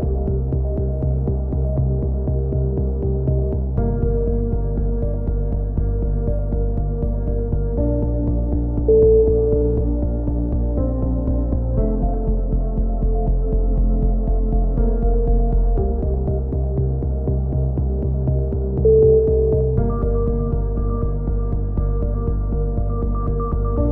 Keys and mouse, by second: 2.0-2.4 middle drag, 2.4-3.0 drag, 3.0 Tab, 3.4-4.0 drag, 4.3 KP_3, 4.5-5.4 drag, 5.1 z, 6.1 k, 9.5-11.3 typing, 9.7 click, 11.4-12.0 drag, 12.6 k, 14.7 a, 14.8 z, 15.2 Tab, 20.3 Tab, 20.5-21.1 drag, 23.8 ctrl+r.